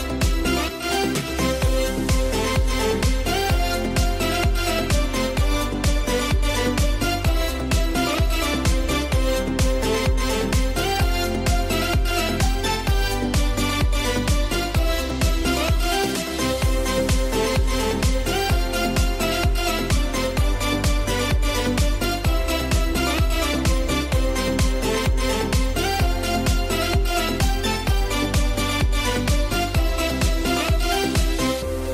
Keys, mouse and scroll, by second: 1.3-4.2 drag, 4.2 scroll down 1, 5.2 click, 23.3 click, 23.8 click, 25.8-28.4 drag, 28.4 ctrl+0, 31.6-31.9 drag.